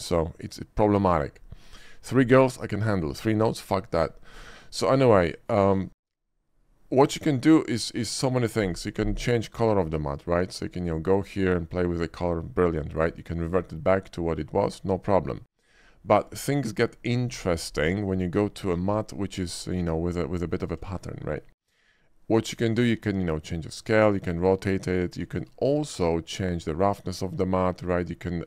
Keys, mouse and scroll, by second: 5.3 shift+middle drag, 5.9 shift+middle drag, 9.6 click, 10.4 click, 11.1 click, 11.8 click, 13.2-13.5 drag, 16.2 click, 17.9 click, 20.4 middle click, 20.8 scroll up 1, 21.1 shift+middle click, 21.4 shift+middle click, 22.5 shift+click, 23.3-24.0 shift+drag, 24.7 drag, 25.2 click, 26.5 click, 27.4 click.